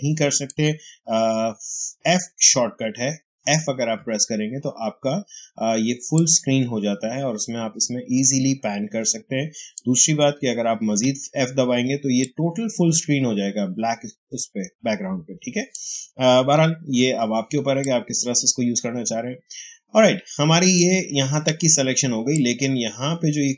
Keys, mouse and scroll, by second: 3.9 f, 5.8 space, 6.0 click, 6.2 space, 9.4 space, 10.7 f, 11.8 space, 12.1 click, 12.2 space, 16.4 f, 17.4 space, 17.7 click, 17.9 space, 22.2-23.5 ctrl+drag.